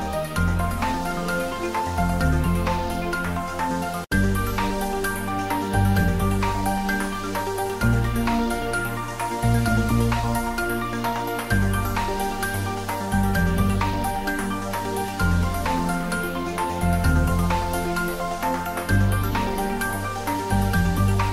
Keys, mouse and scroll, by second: 0.2 click, 0.6 ctrl+middle click, 1.0-2.3 shift+middle drag, 2.0-5.4 typing, 2.9 click, 4.3 click, 5.8 click, 8.6 middle click, 9.2 click, 9.9 Tab, 10.1 click, 10.6 3, 11.5 click, 14.6 i, 15.1 click, 15.5 ctrl+z, 15.7 middle click, 17.7 click, 19.3 s, 19.9 click, 20.2 ctrl+z, 21.0 e.